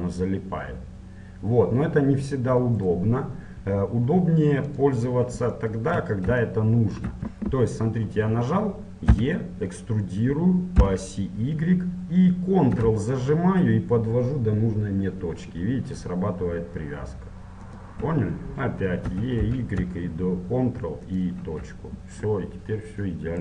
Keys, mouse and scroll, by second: 4.7-6.6 drag, 6.6-8.3 middle drag, 9.1 e, 19.2 e, 22.5-23.4 middle drag.